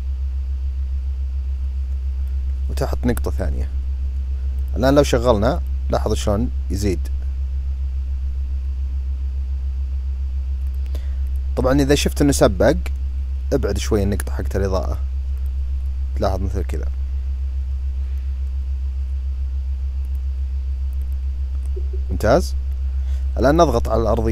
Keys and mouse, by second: 3.0 click, 4.3 click, 10.4 click, 10.9 click, 12.3-13.8 drag, 14.5 click, 15.2 click, 20.7 click.